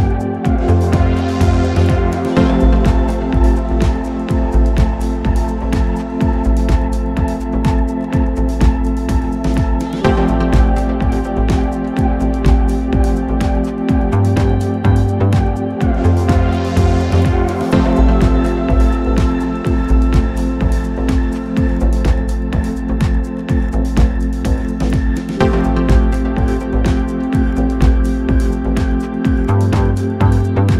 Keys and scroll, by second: 6.8 shift+l, 7.1 shift+e, 7.3 Return, 12.0 Escape, 15.7 0, 15.8 Return, 18.7 p, 19.5 3, 23.0 l, 24.4 1, 25.9 p, 27.5 1, 29.0 ctrl+F1.